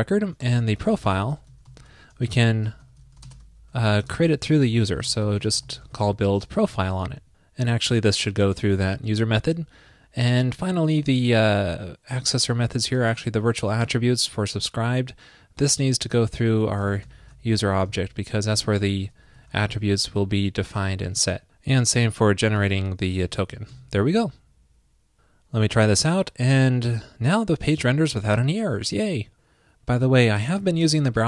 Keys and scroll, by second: 17.5 alt+shift+Left, 17.9 super+c, 19.3 alt+shift+Left, 19.7 super+v, 23.2 super+v, 23.6 super+s.